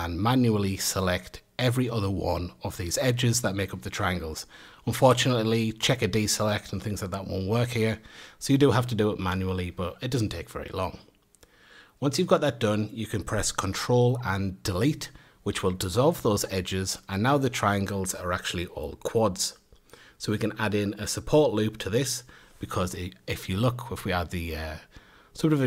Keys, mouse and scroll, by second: 0.7 2, 1.6 click, 2.2 shift+click, 3.1 shift+click, 3.8 shift+click, 4.6 shift+click, 5.3 shift+click, 6.1 shift+click, 6.7 shift+click, 7.4 shift+click, 8.2 shift+click, 9.1 shift+click, 9.7 shift+click, 10.4 shift+click, 11.1 shift+click, 12.0 shift+click, 12.7 shift+drag, 15.1-16.6 middle drag, 16.6 click, 17.1 click, 17.5 click, 18.1 click, 18.6-19.1 scroll down 1, 19.1-19.5 shift+middle drag, 19.5 a, 20.0 scroll up 1, 20.3 Tab, 22.9-23.8 middle drag, 23.8 Tab, 24.8 ctrl+r.